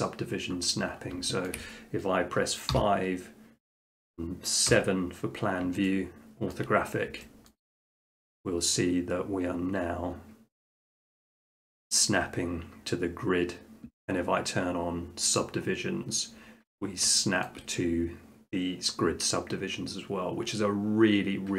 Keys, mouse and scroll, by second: 1.1 middle click, 1.5 shift+middle click, 2.7 5, 4.7 7, 6.5-7.3 shift+middle drag, 15.4 click, 16.4 middle click, 16.5 middle click, 16.8 middle click, 17.2 shift+middle click, 17.5 shift+middle click.